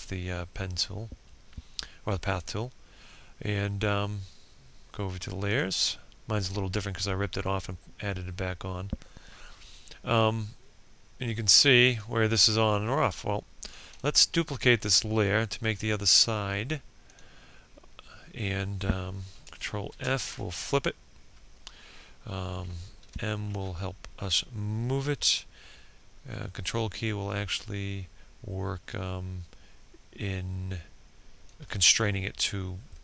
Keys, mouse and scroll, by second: 3.9 click, 12.3 right click, 15.4 click, 18.2 shift+f, 19.1 click, 21.4 m, 21.9-29.8 drag.